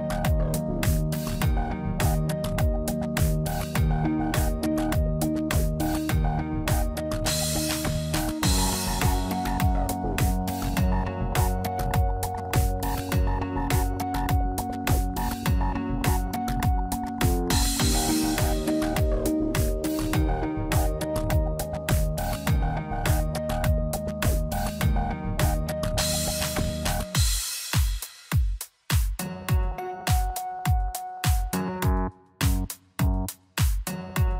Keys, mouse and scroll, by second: 0.5 click, 1.4 Tab, 3.1 middle click, 4.1 click, 5.8 ctrl+a, 7.2 click, 10.6 click, 17.4 click, 21.1 middle click, 21.9-22.2 scroll down 3, 22.2 middle click, 22.9 scroll down 1, 23.3 click, 24.0 middle click.